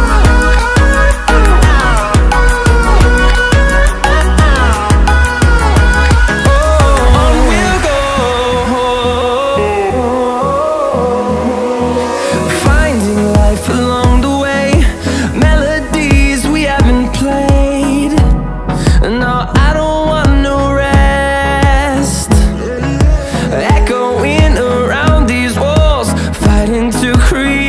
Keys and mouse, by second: 0.9 click, 2.5 space, 5.1 space, 6.6 click, 7.5 click, 8.7 click, 9.8 middle click, 11.2 click, 12.6-13.7 drag, 15.9 i, 19.9-21.0 drag, 22.4 i.